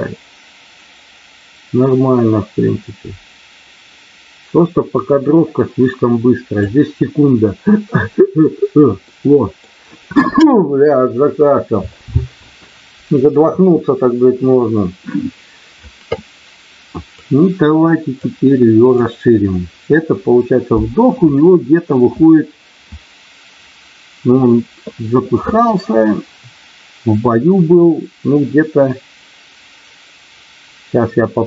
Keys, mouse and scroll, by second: 9.0 middle click, 17.1 click, 18.8 click.